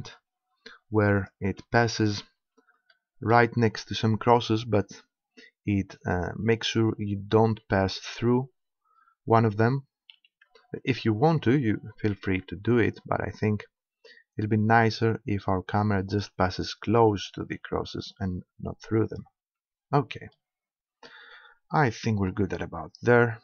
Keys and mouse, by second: 1.3-4.8 drag, 10.2 g, 16.2-18.2 drag, 17.5 g, 19.2-20.7 drag, 21.2 click, 22.3 KP_0.